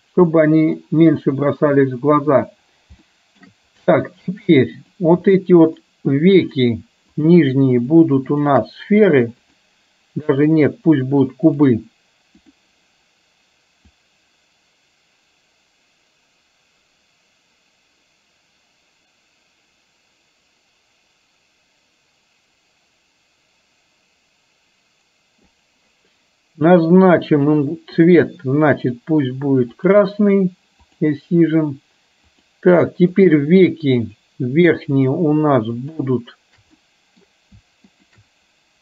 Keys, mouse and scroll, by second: 0.5 middle click, 3.1-3.6 shift+middle drag, 5.7-6.2 shift+drag, 6.5 shift+click, 7.2 shift+click, 7.8 shift+click, 8.3 shift+click, 9.5-11.8 drag, 12.5 click, 14.0-27.2 drag, 28.1-30.1 drag, 31.1 click, 33.3 shift+drag, 34.2 shift+click, 35.0 shift+click, 35.8-36.2 shift+drag, 37.0 middle click, 38.0 shift+click.